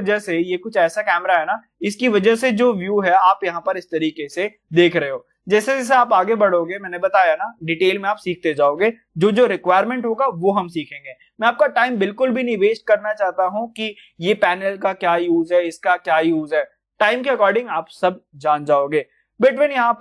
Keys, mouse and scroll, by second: 1.9-5.2 drag, 6.2-12.4 middle drag, 14.5 middle click, 14.6-14.9 scroll down 1, 14.9 scroll up 1, 15.8-16.9 scroll up 1, 16.9-20.0 middle drag.